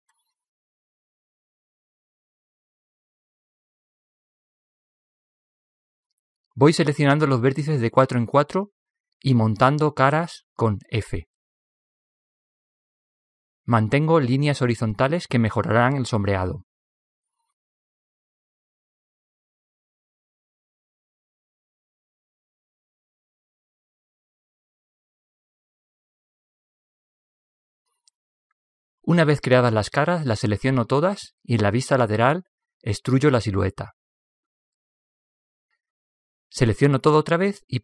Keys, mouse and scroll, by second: 2.0-5.9 drag, 6.1 click, 6.9-11.1 right drag, 10.1 f, 11.4-20.2 right drag, 14.1 f, 20.6-25.4 right drag, 20.6 f, 24.7 f, 29.1 a, 29.4 a, 32.0 KP_3, 33.8 e.